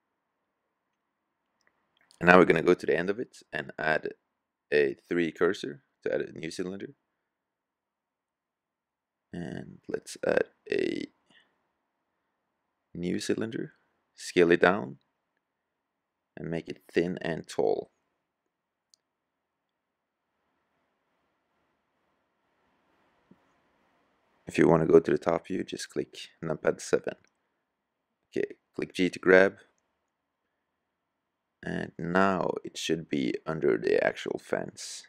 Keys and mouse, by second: 1.4 middle drag, 1.8 middle click, 14.3 s, 16.1-17.9 drag, 20.0 KP_7, 27.9 g, 32.8-34.6 drag, 34.6 s.